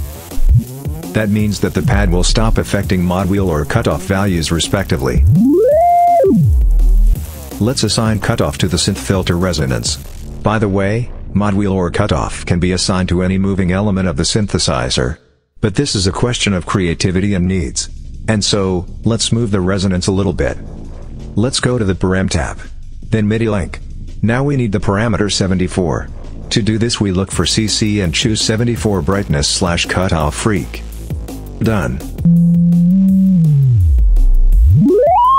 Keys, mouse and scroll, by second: 0.1-2.5 drag, 3.5-4.6 drag, 4.9-7.1 drag, 10.1-18.4 drag, 19.2 click, 22.1-22.4 scroll down 2, 24.2-24.5 scroll down 2, 30.1 click, 32.0-35.3 drag.